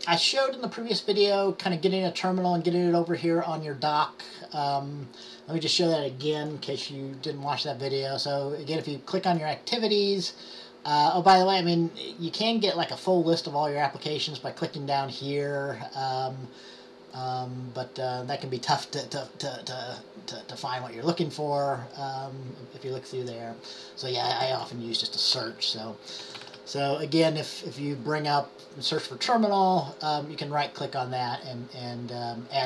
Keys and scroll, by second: 26.1-27.0 typing.